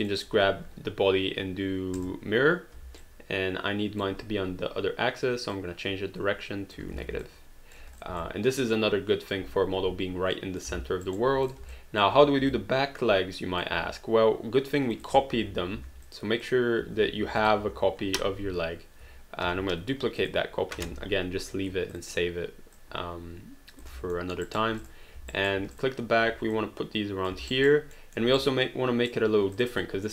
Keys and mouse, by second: 2.0 click, 3.0 alt+click, 5.5 click, 6.9 alt+d, 7.2 alt+click, 8.0 click, 8.2 alt+click, 10.4 alt+click, 10.7 alt+d, 11.1 alt+right click, 11.4 click, 11.7 alt+click, 12.5 alt+click, 14.9 click, 15.4 h, 16.0 click, 16.8 h, 17.4 click, 17.6 h, 19.4 ctrl+d, 20.2 click, 20.9 h, 21.9 click, 24.2 alt+middle click, 24.4 alt+right click, 24.8 click, 25.4 alt+right click, 25.7 click, 26.3 w, 26.5 click, 27.5 alt+right click, 27.9 alt+middle click, 28.4 right click, 29.6 click.